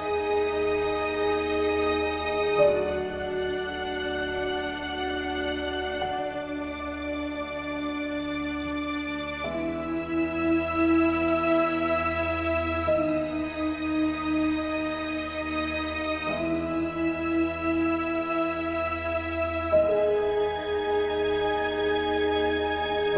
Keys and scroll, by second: 18.9 ctrl+z.